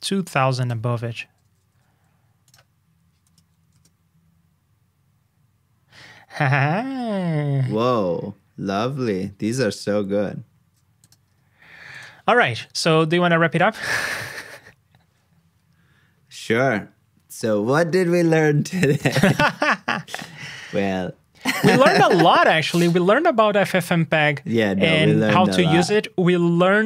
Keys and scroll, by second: 1.7 super+s.